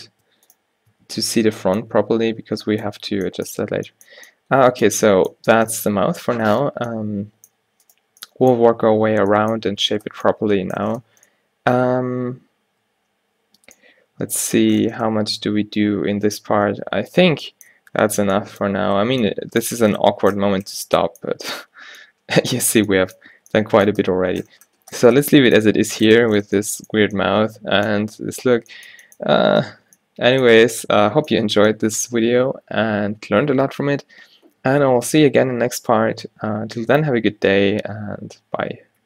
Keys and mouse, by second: 1.4 click, 1.4 h, 2.1 Tab, 3.1 Tab, 8.0-9.7 drag, 13.2 middle click, 15.5 z, 15.9 z, 16.4 Tab, 17.8 a, 18.3 a.